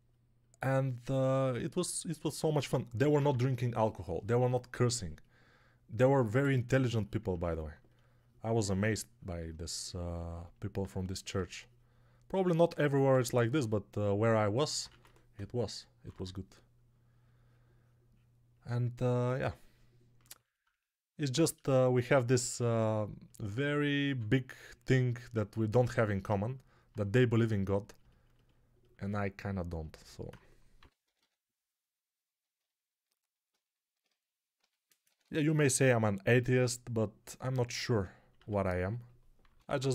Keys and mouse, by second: 2.4 3, 2.9 [, 3.0 [, 3.1 [, 14.7 1, 15.2-16.0 [, 20.5-25.6 ctrl+drag, 20.5-25.6 ctrl+right drag, 23.9 2, 30.7 p, 30.9 ], 31.1 ], 34.4 g, 34.9 ], 35.1 ], 38.2 1, 39.3 p, 39.5 [, 39.6 [.